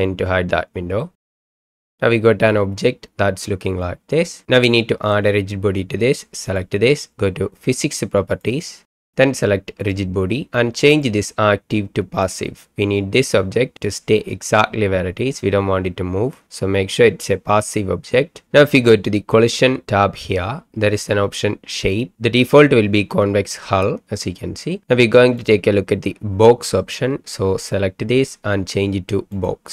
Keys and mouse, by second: 1.0 click, 6.5 click, 8.3 click, 9.8 click, 11.0-12.4 drag, 25.6-29.6 right drag.